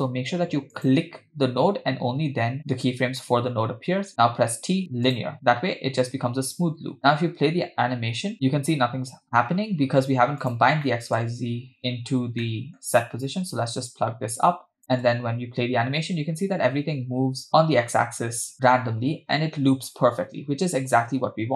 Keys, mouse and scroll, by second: 0.8 click, 4.3 t, 7.1 space, 10.5 click, 10.9 middle click, 12.4 middle click, 13.9-14.8 drag.